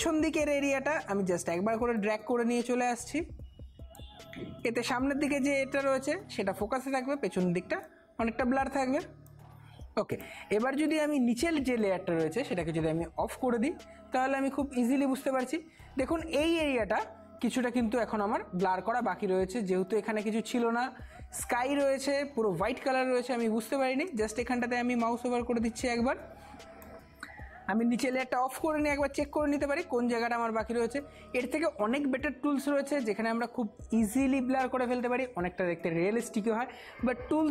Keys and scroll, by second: 6.5 [, 6.6 [, 6.8 [, 22.6-23.9 typing.